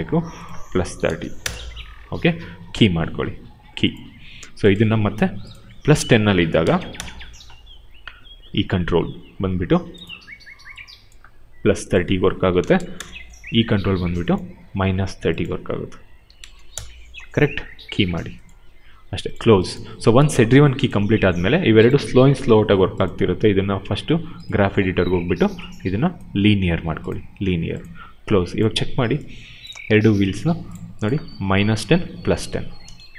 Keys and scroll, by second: 0.9 3, 1.3 Return, 6.4 1, 6.9 Return, 12.4 3, 12.9 Return, 15.9 -, 16.7 Return.